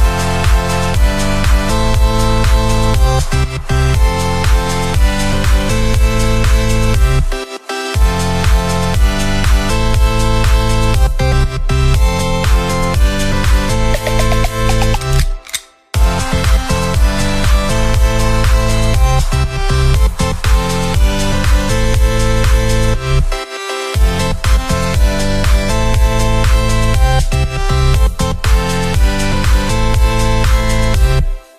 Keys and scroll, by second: 2.9 ctrl+-, 3.4 ctrl+=, 5.0 ctrl+=, 13.9 ctrl+z, 15.9 p, 21.0 p, 30.2 ctrl+0, 30.8 ctrl+=.